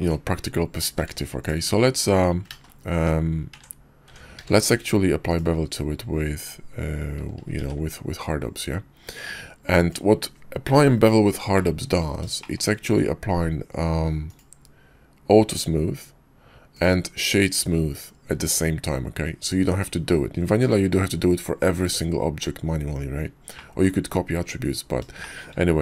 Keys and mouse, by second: 1.0 q, 2.5 ctrl+z, 3.5 Tab, 4.1 Tab, 4.4 q, 11.5-12.1 drag, 12.4 shift+drag, 14.3-16.6 drag, 16.8-18.3 drag, 23.5-23.9 middle drag, 25.2 shift+middle drag.